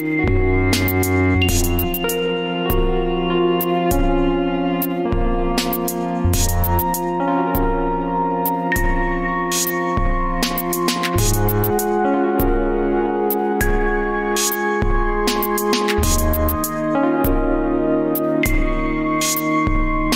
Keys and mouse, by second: 0.0 n, 1.1-2.2 middle drag, 3.7 ctrl+z.